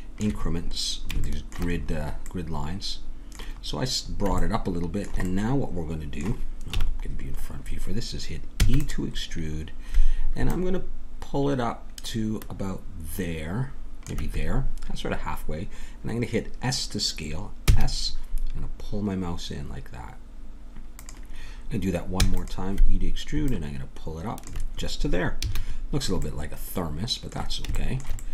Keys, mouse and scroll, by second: 1.2-2.7 middle drag, 6.7 KP_1, 8.6 e, 10.5-12.4 drag, 17.7 s, 22.2 e, 23.5-25.3 drag, 25.4 a, 25.9 middle click.